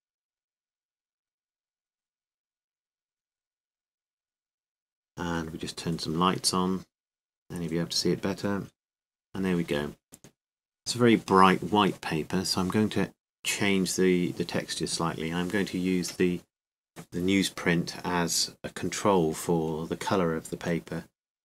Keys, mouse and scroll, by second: 0.0-2.4 drag, 3.4-7.7 drag, 10.0-16.7 drag, 16.7 middle click, 18.3-20.3 drag, 20.3-21.4 middle drag.